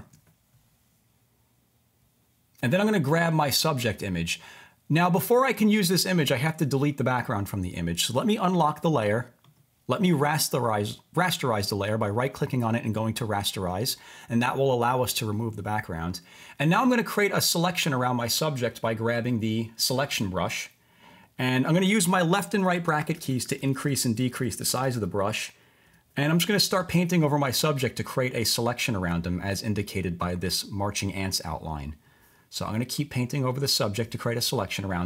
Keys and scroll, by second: 22.5-25.8 typing, 33.3-34.1 typing.